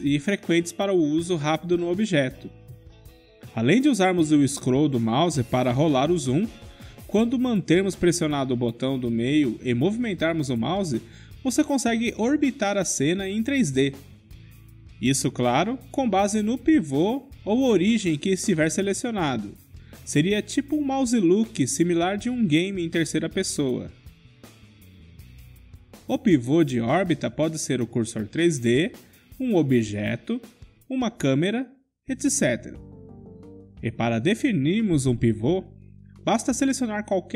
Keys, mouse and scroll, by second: 1.5-2.7 right drag, 4.4-6.4 drag, 7.5-14.7 middle drag, 20.2 KP_Decimal, 21.9-23.9 middle drag, 27.7-29.7 drag, 29.0 KP_Decimal, 30.0-32.0 middle drag, 37.1-37.3 drag.